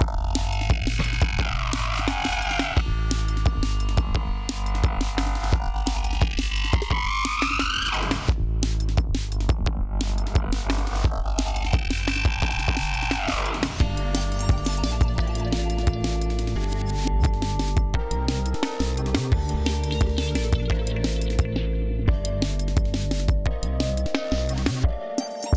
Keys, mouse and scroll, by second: 0.3-1.1 ctrl+scroll up 5, 3.4 ctrl+scroll down 2, 3.9 ctrl+scroll down 2, 4.4 scroll up 2, 5.5-6.7 ctrl+scroll up 7, 7.0-7.3 scroll up 2, 7.5-8.2 scroll up 4, 8.4 scroll down 2, 10.7 ctrl+scroll up 2, 13.0 ctrl+scroll down 1, 13.6 ctrl+scroll up 1, 15.3 ctrl+scroll down 1.